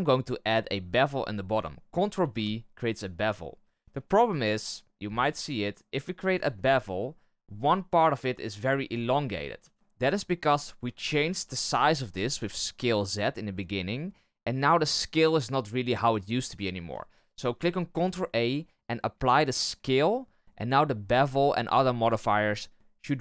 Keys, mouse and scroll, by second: 2.1 ctrl+b, 6.5-9.6 middle drag, 9.6 ctrl+z, 9.7-11.3 shift+middle drag, 17.9 ctrl+a.